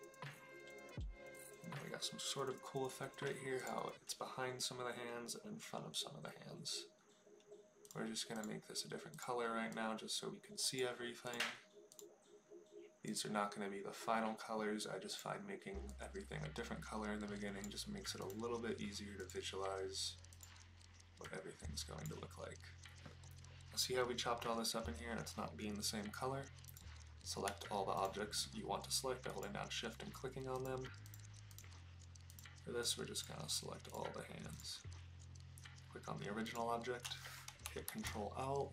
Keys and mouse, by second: 8.4 click, 9.1 click, 11.2 click, 11.9 click, 15.1 click, 19.2 click, 20.3 click, 26.6 click, 30.6 shift+click, 31.1 shift+click, 33.2 shift+click, 37.9 ctrl+l.